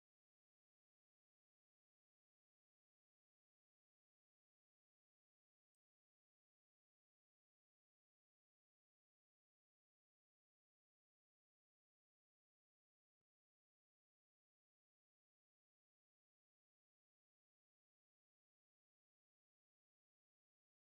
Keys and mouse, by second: 0.0 Up, 1.8 Down, 2.2 Up, 3.2 g, 6.3 Up, 6.6 Down, 7.0 Down, 7.5 Down, 8.0 Down, 8.2 Down, 8.9 space, 13.0 space, 14.5-20.1 drag, 20.4 middle click.